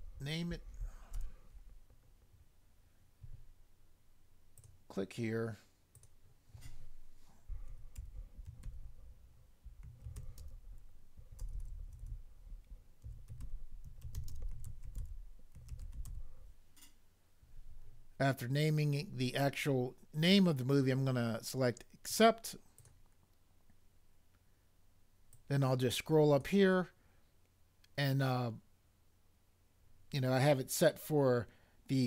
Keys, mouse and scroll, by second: 1.1 Return, 7.7-11.6 typing, 13.0-16.1 typing.